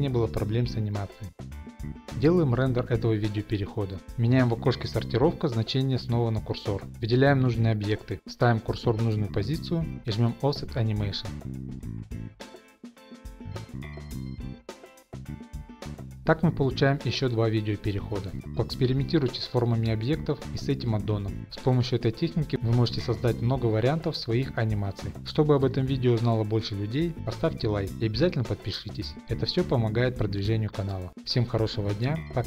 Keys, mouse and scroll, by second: 0.0 click, 0.0 g, 0.6-1.4 scroll, 1.4 click, 1.4 scroll, 2.1 click, 2.2 click, 3.6 scroll, 4.1 click, 4.4 Left, 4.4 scroll, 5.1 shift+scroll, 5.8 click, 6.7 click, 7.4 click, 8.0 shift+right click, 8.5 click, 8.9 shift+middle click, 9.1 shift+middle click, 9.2 click, 9.5 shift+right click, 9.9 middle click, 9.9-10.4 scroll, 9.9 0, 10.5 click, 11.9 click, 12.2 click, 13.3 click, 15.3 click, 15.7 shift+right click, 16.5 click, 17.0 click.